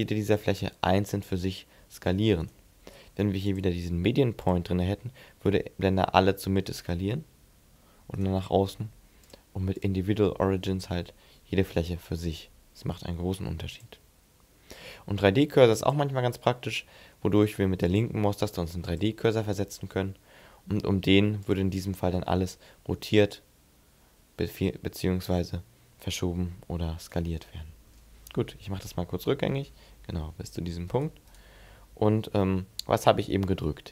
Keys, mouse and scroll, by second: 2.3 right click, 3.3 click, 4.9 s, 8.0 right click, 9.0 click, 10.1 s, 12.8 right click, 13.6 click, 17.6 click, 18.6 click, 21.3 click, 22.2 r, 26.9 right click, 28.5 ctrl+z, 30.3 g, 30.8 right click, 31.1 right click.